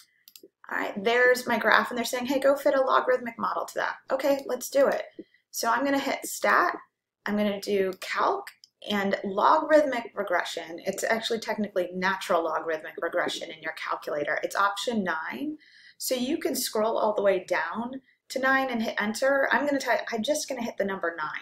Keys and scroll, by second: 0.3 9, 8.0 Right.